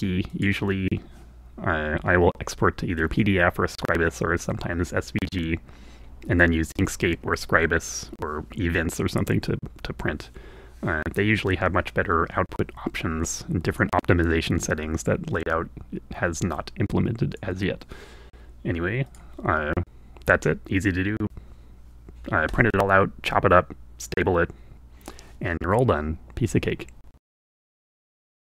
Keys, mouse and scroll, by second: 12.8-19.2 drag.